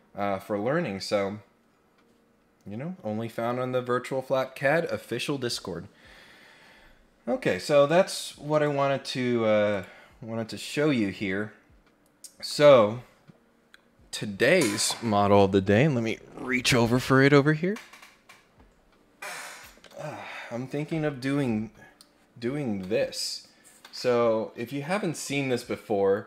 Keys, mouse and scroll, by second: 8.5 click, 9.7 click, 10.4-10.9 scroll up 1, 12.5 click.